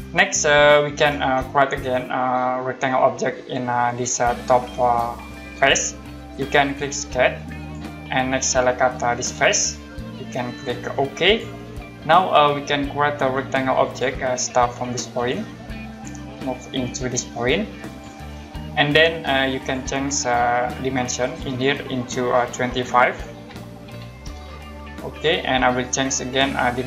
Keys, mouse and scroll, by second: 0.0 right click, 1.5 middle click, 2.1 scroll up 1, 7.6 click, 9.6 click, 11.3 click, 13.8 click, 15.9 click, 17.9 click, 19.6 click, 21.2 click, 23.2-23.8 typing, 25.2 click.